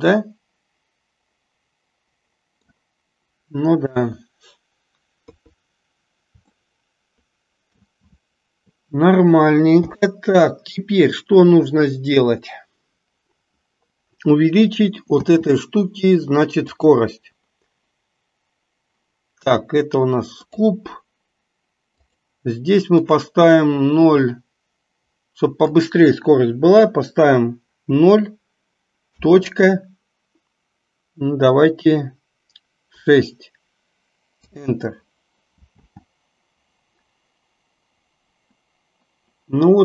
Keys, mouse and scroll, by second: 4.0 KP_1, 5.3 KP_3, 6.6-7.9 shift+middle drag, 9.9 n, 15.3 space, 16.7 click, 22.0-34.5 drag, 35.8 space.